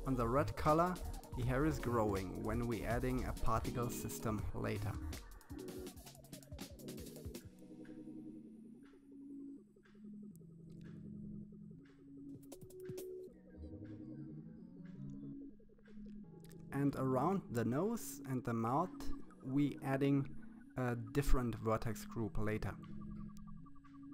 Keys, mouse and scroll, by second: 2.4 click, 2.9 middle click, 3.0 click, 3.6 click, 4.1 click, 4.4 middle click, 4.6 click, 4.9 click, 5.2 click, 5.5 middle click, 5.8 click, 6.0 click, 6.4 middle click, 6.5 click, 7.0 middle click, 7.1 click, 7.8 click, 8.3 middle click, 8.4 click, 9.0 click, 9.9 click, 10.4 click, 10.9 middle click, 11.1 click, 12.0 click, 12.8 click, 13.1 middle click, 13.3 click, 13.5 middle click, 13.7 click, 13.8 scroll down 2, 13.9 middle click, 14.1 scroll up 1, 14.3 click, 17.1 click, 17.9 click, 18.4 scroll down 3, 18.5 middle click, 18.6 scroll up 3, 18.7 click, 19.6 click, 20.2 scroll up 2, 20.4 click, 22.2 scroll down 2, 22.3 middle click, 22.4 scroll up 1, 22.5 scroll down 4, 22.5 middle click, 23.0 middle click, 24.0-24.1 drag.